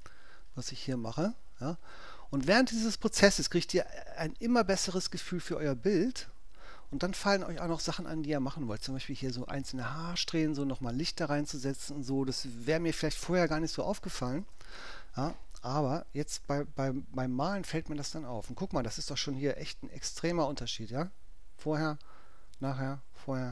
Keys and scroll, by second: 13.5 space, 14.3 super+space, 14.4 super+0.